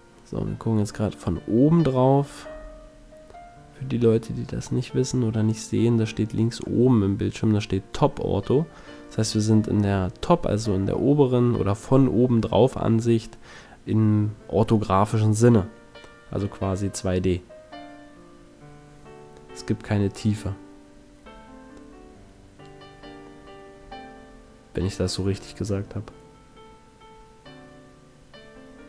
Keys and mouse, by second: 1.5 s, 5.2 s, 7.0-10.0 drag, 7.2 s, 10.4-12.4 drag, 12.3 KP_1, 17.2 e, 19.2 click, 19.5 middle click, 24.0 ctrl+l, 25.1 c, 28.0 middle click, 28.5 click.